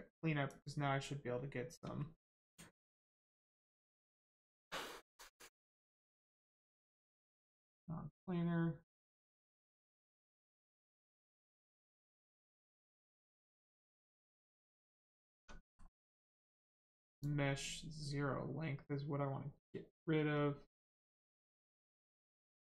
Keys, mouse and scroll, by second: 0.5 click, 5.7 click, 8.9 click, 14.1 click, 14.6 middle click, 15.3 Tab, 15.6 middle click, 17.1 click.